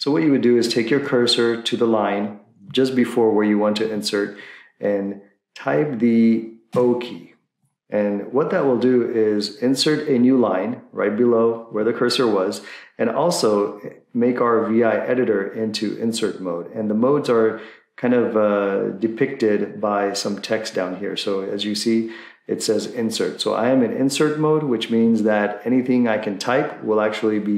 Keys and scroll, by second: 0.7 Left, 0.9 Left, 6.8 o.